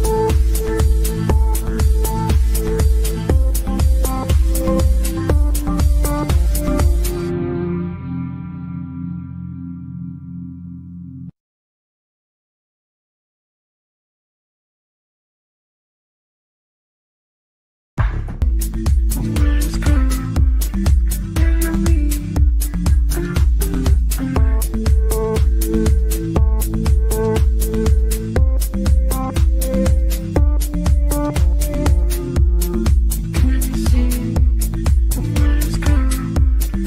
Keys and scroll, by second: 10.0 Delete, 16.8 g, 34.1 Delete.